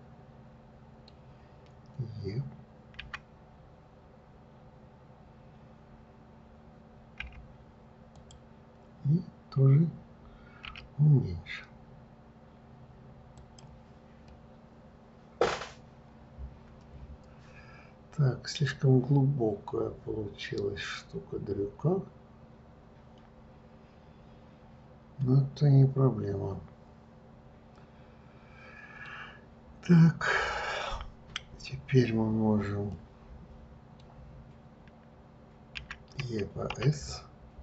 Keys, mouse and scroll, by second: 3.4 e, 11.0 s, 14.7-17.7 middle drag, 33.3-36.1 middle drag, 36.1 e.